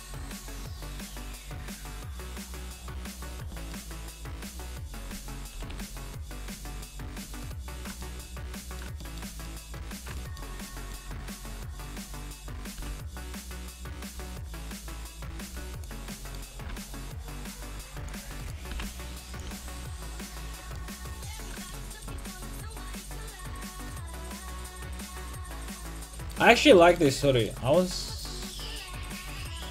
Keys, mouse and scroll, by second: 1.4-3.2 drag, 2.4 a, 3.4 Tab, 5.5 KP_5, 5.7 KP_1, 11.1 Tab, 12.4-14.2 right drag, 12.8 g, 15.4-18.0 drag, 15.6 a, 15.7-18.0 right drag, 16.1-18.0 middle drag, 16.6 g, 18.1-19.3 drag, 18.3 a, 18.4 right click, 18.7 g, 19.5 a, 19.6-21.2 drag, 19.6 right click, 27.4-29.7 right drag, 29.0-29.7 drag.